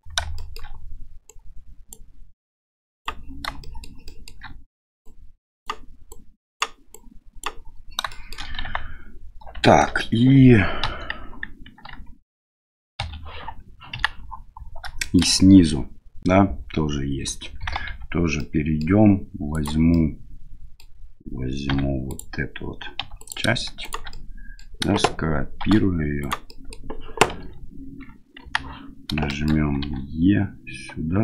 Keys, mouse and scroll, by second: 0.4 shift+middle click, 1.3 right click, 2.6 right click, 3.6 shift+middle click, 4.1 shift+middle click, 5.0 right click, 6.1 right click, 6.9 right click, 8.1 shift+click, 8.7 Tab, 9.6 shift+middle drag, 10.8 KP_1, 11.9 KP_7, 12.5 KP_1, 13.0 KP_Divide, 13.9 KP_1, 15.0 shift+middle drag, 17.9 Tab, 18.4 middle click, 19.5 right click, 19.9 middle click, 21.7 1, 22.1 right click, 23.0 2, 23.2 right click, 23.8 shift+right click, 24.1 middle click, 25.6 shift+d, 26.5 middle click, 27.4 KP_7, 28.4 KP_1, 29.4 shift+middle click, 29.8 e.